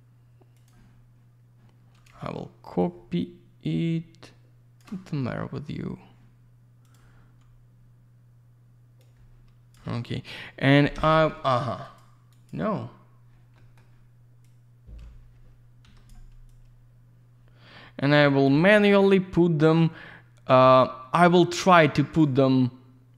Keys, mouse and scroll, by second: 0.5 click, 0.6 click, 2.8 shift+click, 6.8 click, 6.9 click, 9.0 click, 10.3 click, 10.9 Escape, 11.8 click, 12.0 click, 12.3 click, 12.5 double click, 13.5 middle click, 14.4 click, 15.8 Escape, 16.5 click, 19.7 w, 21.4 click.